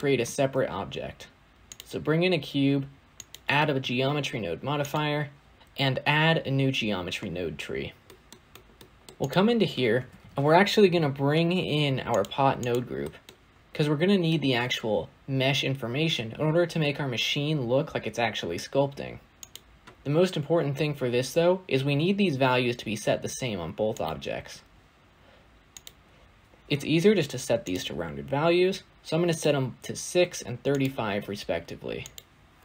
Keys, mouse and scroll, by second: 1.7 shift+a, 3.7-12.1 drag, 12.1 shift+a, 20.6 click, 23.9 click, 27.5 click.